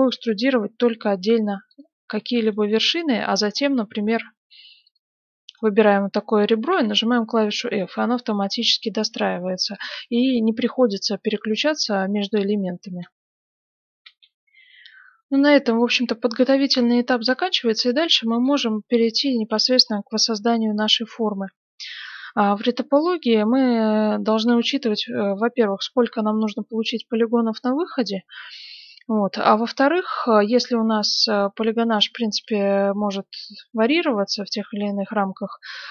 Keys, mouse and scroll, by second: 0.1 e, 2.3 right click, 4.0 e, 5.4 right click, 6.7 f, 7.2 right click, 7.8-9.5 middle drag, 9.5 scroll down 1, 9.7-11.6 middle drag, 11.9-13.8 middle drag, 14.0 F9, 15.7-17.6 middle drag, 18.4-21.4 middle drag, 22.8-25.9 middle drag, 29.5-33.8 middle drag, 34.7-35.0 scroll down 1, 35.0-35.9 middle drag.